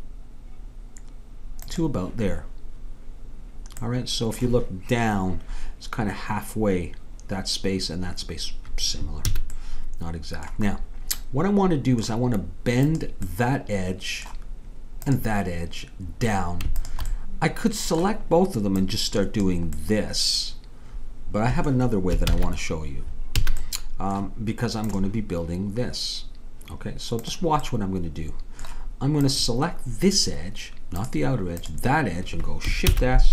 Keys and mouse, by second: 9.3 a, 9.6-13.5 middle drag, 13.3-14.8 drag, 14.8 middle click, 15.1-18.0 drag, 18.9-20.7 drag, 20.7-22.3 middle drag, 22.3 ctrl+z, 23.4 a, 27.7 middle click, 29.3-32.9 drag, 32.9 shift+s.